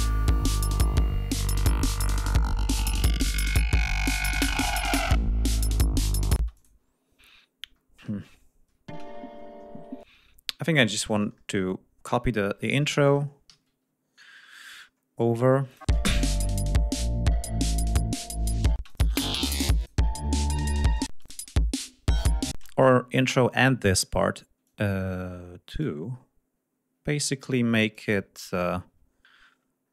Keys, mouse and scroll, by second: 1.8-3.3 drag, 5.5 ctrl+scroll down 2, 6.2 ctrl+space, 6.4 ctrl+click, 6.7-7.8 ctrl+scroll up 3, 8.5 Home, 8.8 space, 9.2 ctrl+scroll down 2, 9.9 ctrl+space, 10.1 ctrl+scroll down 2, 10.9 r, 11.6-12.0 scroll down 2, 12.2-12.9 ctrl+scroll up 4, 13.3 ctrl+s, 13.9 ctrl+scroll up 2, 15.0 scroll up 2, 15.5 click, 15.7 space, 16.7 ctrl+scroll down 2, 18.0 ctrl+scroll down 2, 18.6 ctrl+space, 18.7 ctrl+click, 19.7 click, 21.0 space, 21.1 click, 22.4 space, 22.9 ctrl+scroll up 2, 23.8 ctrl+scroll up 2, 24.5-25.9 ctrl+drag, 26.4-26.7 scroll up 2, 27.1 ctrl+scroll down 2, 27.8 ctrl+click, 28.4 ctrl+click, 29.0-29.4 ctrl+scroll up 3, 29.5-29.9 scroll down 2.